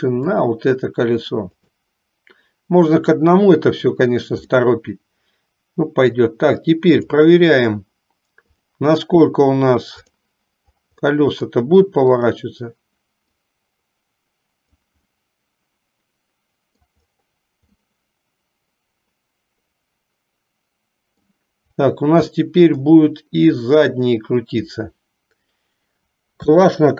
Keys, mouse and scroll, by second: 0.4 click, 4.6-6.4 middle drag, 7.1 click, 8.8-10.3 drag, 11.3 middle click, 13.4-15.0 drag, 15.2-17.0 middle drag, 18.0-21.4 middle drag, 22.5 middle click, 23.9 click.